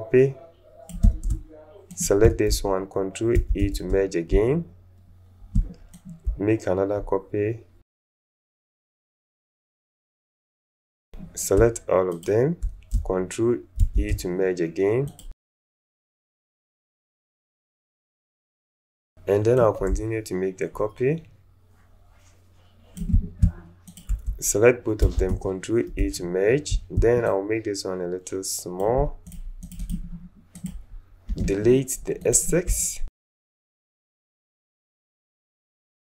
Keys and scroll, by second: 3.3 ctrl+alt+shift+e, 13.8 ctrl+shift+e, 25.0 ctrl+alt+shift+e, 31.4 Delete, 33.7 alt+space, 34.8 alt+space.